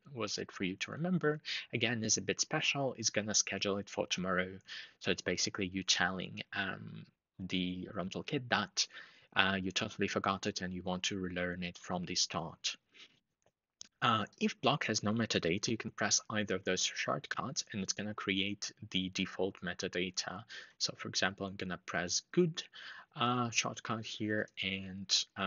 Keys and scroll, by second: 20.2 ctrl+shift+3.